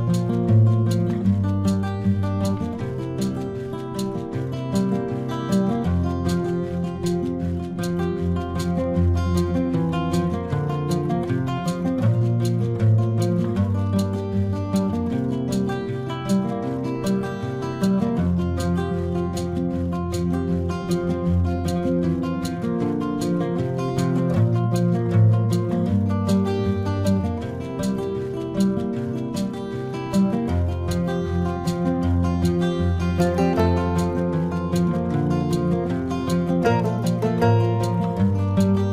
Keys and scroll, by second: 6.5 space, 7.2 ctrl+-, 7.7 ], 12.0 space, 20.1 space, 23.6 space, 28.6 space, 32.4 space, 34.0 ctrl+=, 35.8 ctrl+-, 37.7 space.